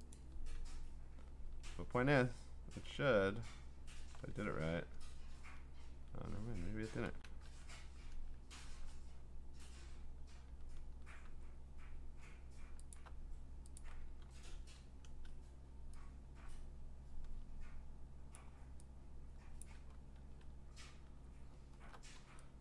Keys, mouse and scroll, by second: 0.2 click, 0.6 ctrl+Tab, 2.3-3.0 scroll, 4.4 ctrl+Tab, 5.9 ctrl+a, 7.1 ctrl+c, 7.6 ctrl+Tab, 10.5 ctrl+v, 11.2 v, 12.9 alt+click, 13.8 click, 14.3 ctrl+t, 18.3 click, 19.6 click, 20.2 Return, 21.2-22.2 ctrl+scroll.